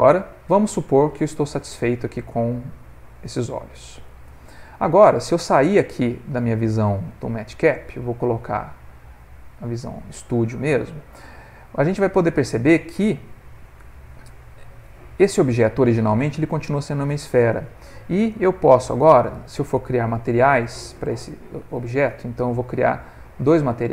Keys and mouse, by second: 0.6 middle click, 1.3 Tab, 2.0 middle click, 2.4 middle click, 6.3 click, 9.9 middle click, 10.7 ctrl+middle click, 11.0 middle click, 13.1 click, 13.8 Tab, 14.3 Tab, 14.7 middle click, 15.3 Tab, 15.5 middle click, 16.1 middle click, 17.0 Tab, 18.4 click.